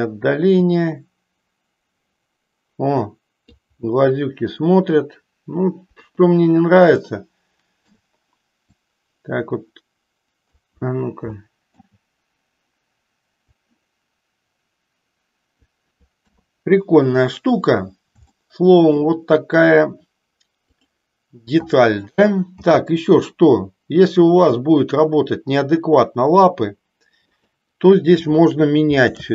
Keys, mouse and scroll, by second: 0.6-3.5 drag, 5.9 KP_1, 6.9-7.9 shift+middle drag, 8.8-10.4 drag, 11.3 shift+middle click, 13.5-15.6 drag, 16.2 KP_3, 18.3 shift+middle click, 20.6 click, 22.6 g, 27.3 click.